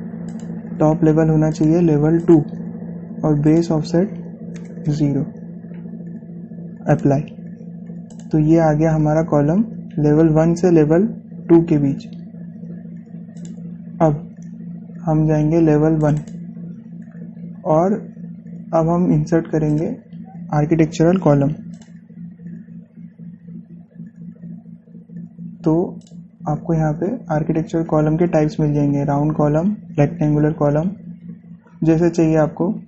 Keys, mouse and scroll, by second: 5.7 Return, 7.7 click, 10.9 typing, 12.9-13.6 scroll down 1, 13.7-14.2 scroll up 1, 14.2 click, 16.8 click, 16.8 typing, 18.1 scroll down 1, 19.2 scroll up 1, 20.2 typing, 20.6 click, 22.6 click, 26.8 click, 27.7 typing, 28.2 scroll down 1, 29.6 scroll, 30.9-31.7 scroll up 1, 30.9 typing, 31.9 scroll down 1, 31.9 typing.